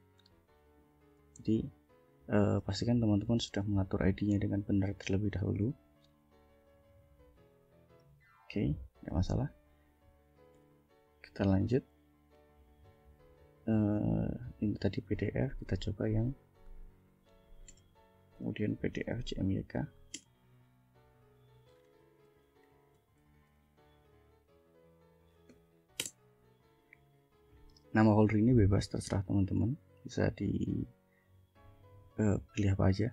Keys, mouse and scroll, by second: 0.9 ctrl+s, 2.4 shift+scroll down 2, 3.5 click, 4.0 click, 8.3 click, 9.3 click, 10.6 ctrl+l, 13.1 click, 14.1 click, 14.9 click, 15.3 click, 16.3 Up, 17.8 Return, 19.3 3, 20.3 Return, 21.8-24.0 typing, 25.5 k, 26.1 Return, 28.6 click.